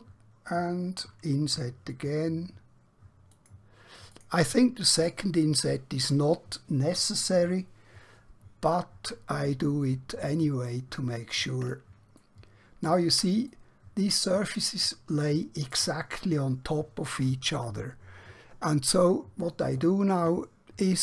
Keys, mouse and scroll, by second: 1.4 i, 3.3 click, 9.9 middle click, 12.3 shift+middle click, 13.5 middle click.